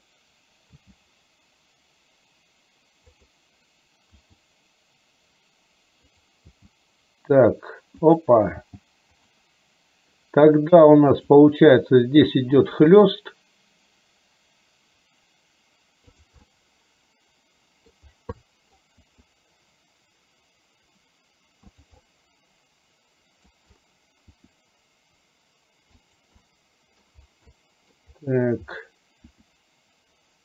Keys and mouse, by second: 0.9 g, 4.3 r, 6.7 g, 8.6 g, 11.1 click, 12.9 r, 16.5-17.9 middle drag, 18.4 middle click, 19.0 r, 22.1-23.5 middle drag, 24.4 r, 26.5 middle click, 27.5 middle click, 29.3 r.